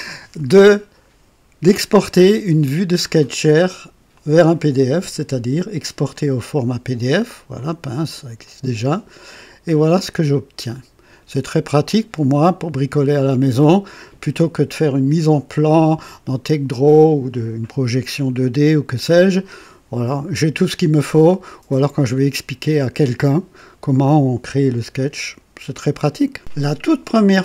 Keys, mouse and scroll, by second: 4.1 click, 6.1 click, 7.4 click, 8.4 click, 9.8 click.